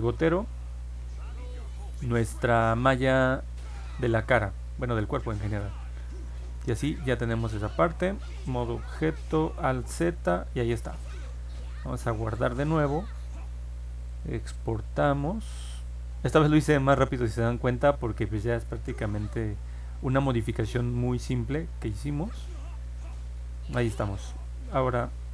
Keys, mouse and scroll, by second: 0.0 click, 4.3 click, 7.6 ctrl+Tab, 9.7 alt+z, 12.3 ctrl+s, 14.0 click, 16.8 click, 18.0 click, 19.0 click.